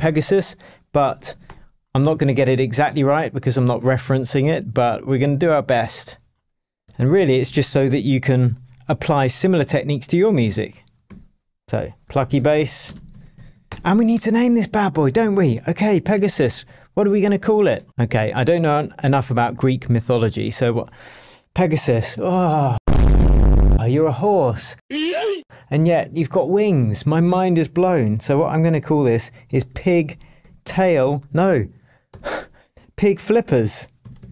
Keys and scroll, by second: 0.0-1.7 typing, 7.4 shift+super+m, 8.4 shift+super+Tab, 8.9 shift+super+Tab, 9.0 shift+super+r, 9.5 super+r, 11.1 super+r, 11.6 shift+super+r, 11.9-13.8 typing, 16.2 super+s.